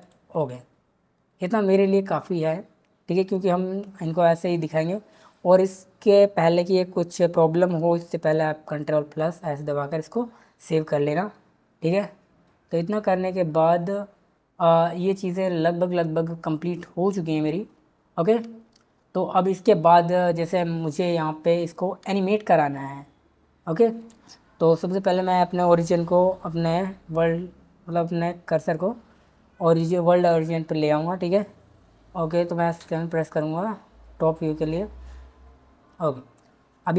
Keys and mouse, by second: 0.0 click, 9.3 ctrl+s, 27.0 shift+s, 32.8 KP_7.